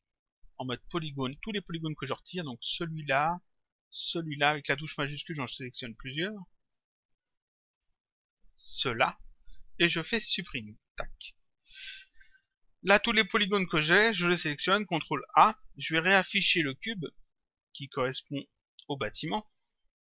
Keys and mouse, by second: 0.9 click, 2.6 click, 4.0 shift+click, 10.7 Delete, 15.0 ctrl+a, 18.7 click.